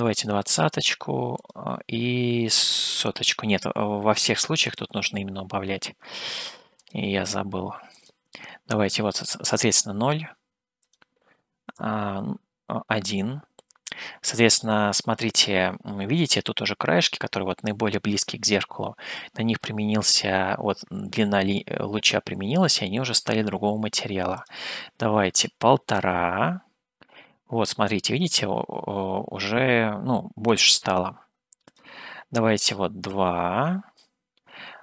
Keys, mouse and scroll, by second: 3.4 KP_0, 11.4-15.3 drag, 24.9-26.1 drag, 34.3-34.8 drag.